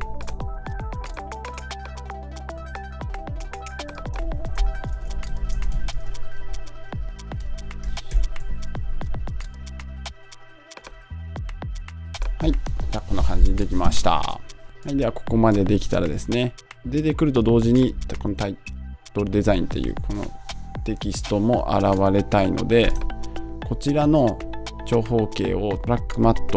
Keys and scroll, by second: 4.7 Down.